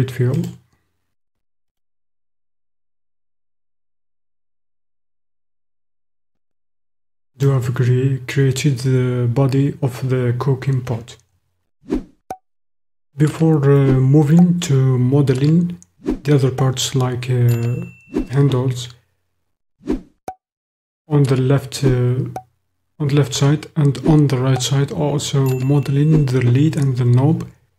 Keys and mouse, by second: 2.7-5.5 drag, 5.5-7.5 middle drag.